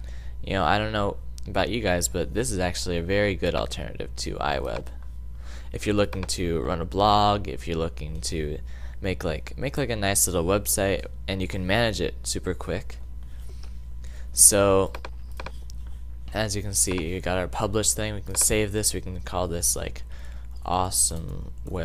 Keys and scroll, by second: 19.9-21.8 typing.